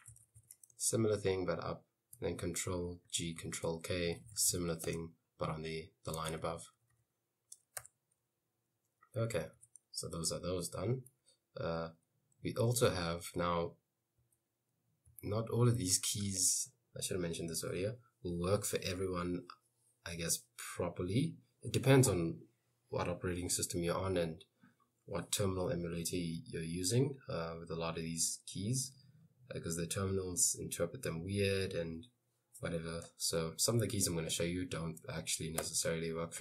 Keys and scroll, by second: 0.0-1.0 typing, 3.2 ctrl+g, 3.4 ctrl+k, 3.8-5.3 typing, 6.4 Escape, 6.5-7.8 typing, 9.3 j, 9.6 j, 11.3 j, 12.7 k, 13.0 k, 14.3 k, 15.1 l, 15.7 h, 33.1-35.7 typing.